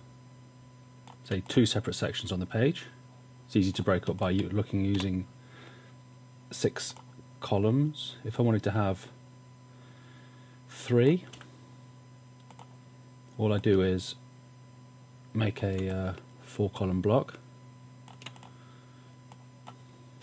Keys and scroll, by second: 5.0 BackSpace, 11.4 v.